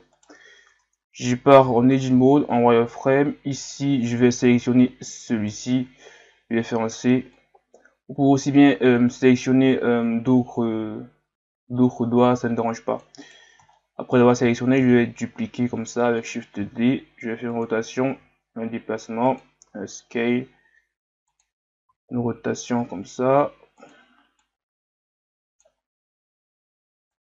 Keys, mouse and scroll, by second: 0.2 right click, 0.7 Tab, 2.3-3.1 scroll up 1, 5.3 right click, 13.7-14.8 scroll down 1, 14.8 shift+d, 24.4-25.9 drag, 25.9 s.